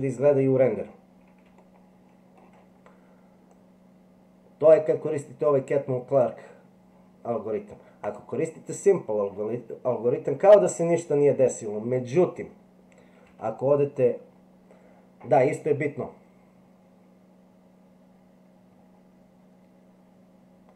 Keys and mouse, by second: 1.5 shift+middle click, 3.6-6.2 drag, 8.0 click, 13.2 Tab.